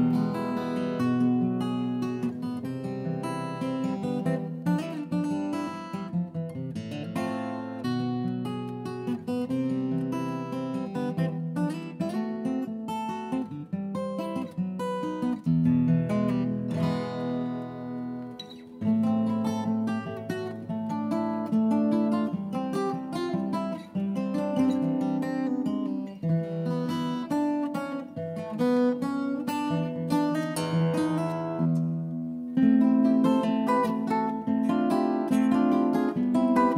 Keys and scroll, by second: 0.0-0.9 typing, 5.0 Delete, 16.3 Left, 16.7 Right, 16.7 Right, 18.9 Left, 19.0 Left, 19.2 Left, 19.9 Down, 20.0 Return, 21.5 Return, 22.6 Delete, 24.4 Escape, 31.9 Return.